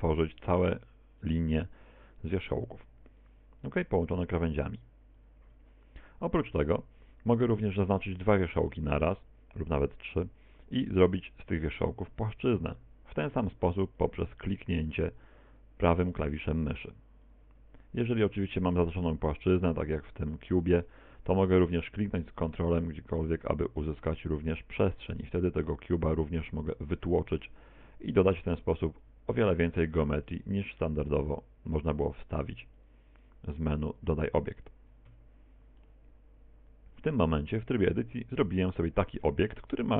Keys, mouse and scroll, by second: 0.4 ctrl+click, 0.8 ctrl+click, 1.3 ctrl+click, 1.7 ctrl+click, 2.1 ctrl+click, 2.5 ctrl+click, 2.9 ctrl+click, 3.3 ctrl+click, 3.7 ctrl+click, 4.1 ctrl+click, 4.4 ctrl+click, 4.8 ctrl+click, 5.2 ctrl+click, 7.9 right click, 8.6 shift+right click, 12.2 ctrl+click, 13.4 ctrl+click, 14.0 ctrl+click, 14.6 ctrl+click, 15.1 ctrl+click, 15.5 ctrl+click, 16.0 ctrl+click, 16.4 ctrl+click, 16.9 ctrl+click, 17.3 ctrl+click, 19.2 right click, 19.5 shift+right click, 20.2 shift+right click, 20.6 shift+right click, 21.2 middle click, 24.1 ctrl+click, 24.8 middle click, 28.1-28.5 scroll down 3, 28.5 shift+middle click, 29.5 ctrl+click, 29.9 ctrl+click, 30.5 ctrl+click, 30.9 ctrl+click, 31.3 ctrl+click, 31.7 ctrl+click, 32.4 ctrl+click, 32.8 ctrl+click, 33.3 ctrl+click, 33.9 ctrl+click, 34.3 Tab, 34.3 middle click.